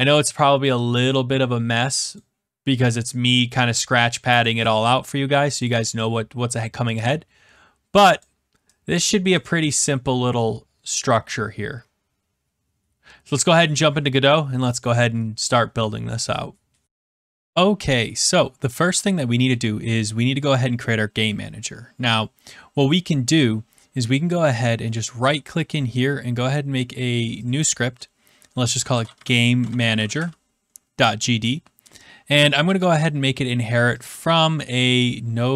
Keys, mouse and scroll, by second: 2.1 click, 4.3 click, 4.6 click, 7.0 click, 8.2 click, 9.6 click, 10.9 middle click.